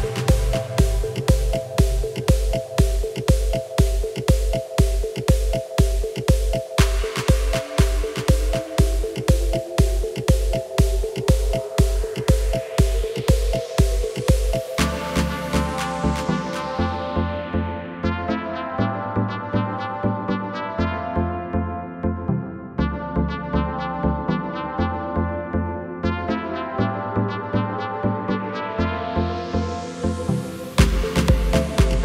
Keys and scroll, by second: 6.2 shift+e, 16.7 KP_1, 17.7 Tab, 22.5 Tab, 29.8 shift+e, 31.8 Tab.